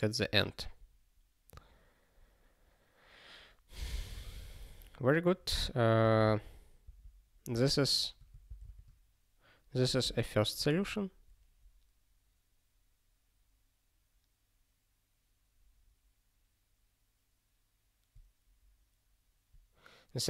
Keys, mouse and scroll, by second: 3.9 click, 6.0 ctrl+p.